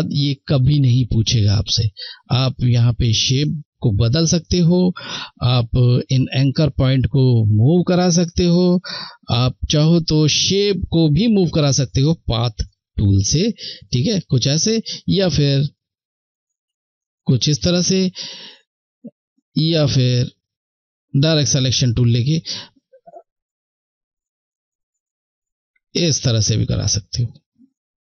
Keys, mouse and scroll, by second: 1.2 click, 15.2 click, 18.9 click, 22.8 click.